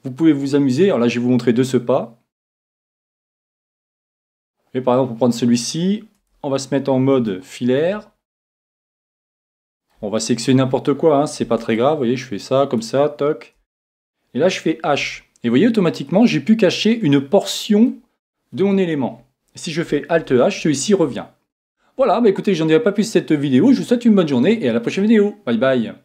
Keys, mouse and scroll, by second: 2.7-4.6 drag, 4.6-7.3 middle drag, 6.3 Tab, 7.3-8.8 middle drag, 8.9 middle click, 9.3-12.1 middle drag, 11.4 c, 15.0 h, 15.9-17.8 middle drag, 20.2 alt+h.